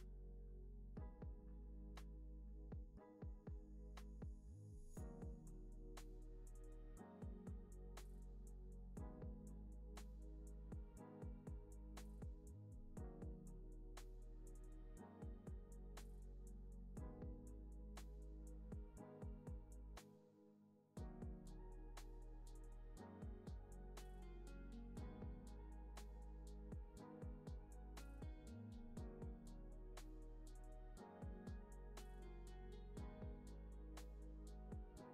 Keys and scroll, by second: 1.6 space, 3.0 space, 6.3 space, 9.2 space, 10.7 alt+w, 12.0 space, 18.4 space, 18.7 super+s, 21.2 space, 25.0 space, 34.6 alt+q.